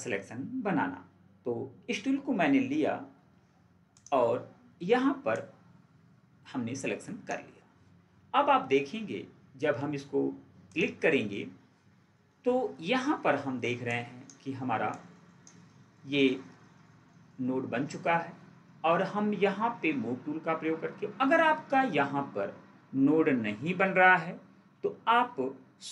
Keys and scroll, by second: 3.2 ctrl+4.